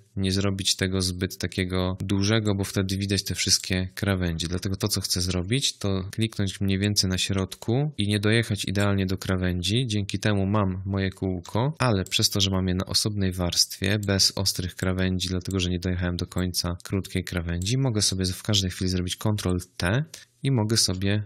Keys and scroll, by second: 4.4 ctrl+z, 18.3 ctrl+t.